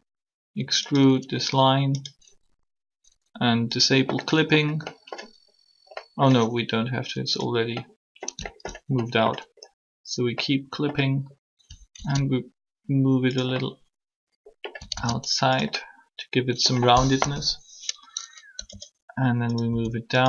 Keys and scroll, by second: 11.8 alt+-, 17.2 3, 18.5 e, 19.7 s.